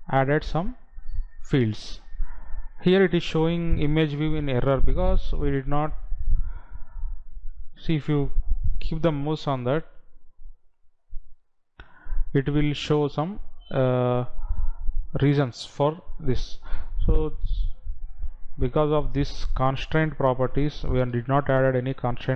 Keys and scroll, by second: 21.6 ctrl+c.